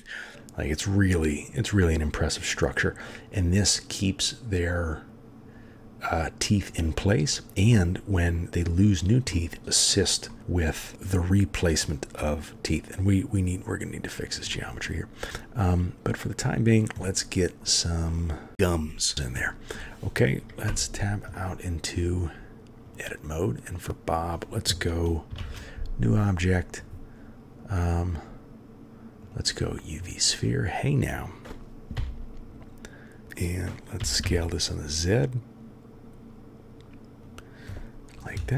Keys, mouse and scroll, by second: 7.7 middle click, 7.8-8.1 drag, 8.1 middle click, 9.3 middle drag, 10.3-11.8 middle drag, 10.6 click, 14.5-14.9 middle drag, 15.3 click, 15.4 middle click, 15.8 drag, 15.9-16.4 middle drag, 17.0 click, 18.1 click, 18.2-18.8 middle drag, 18.8 click, 19.4 click, 20.7 Tab, 21.3 click, 25.4 shift+a, 31.9 s, 34.0 s, 38.3 KP_3.